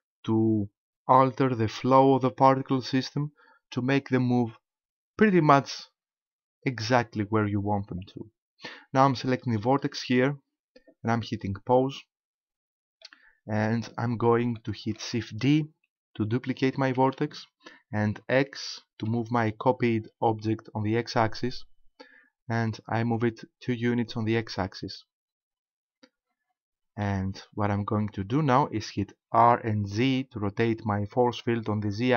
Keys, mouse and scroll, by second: 9.8 right click, 11.9 click, 13.1 middle click, 14.6 shift+middle click, 16.9 shift+d, 24.5 ctrl+click, 24.9 middle click, 29.4 r.